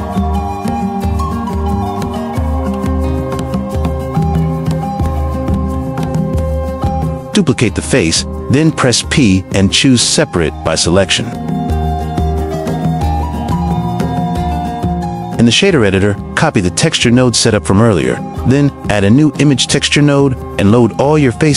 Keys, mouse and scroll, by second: 0.2 click, 0.5 middle click, 1.4 click, 2.1 click, 3.9 middle click, 4.7 middle click, 5.7 middle click, 7.7 shift+d, 7.9 shift+d, 8.8 click, 9.5 p, 11.8 click, 12.0 x, 12.8 click, 12.9 BackSpace, 13.2 b, 13.4 x, 15.2 click, 16.1-18.5 drag, 21.5 click.